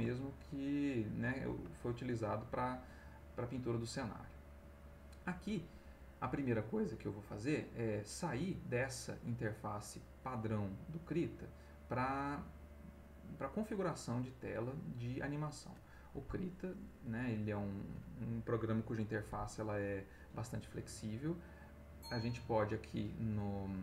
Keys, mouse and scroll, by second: 7.6-8.4 drag, 16.9 click, 22.2 click.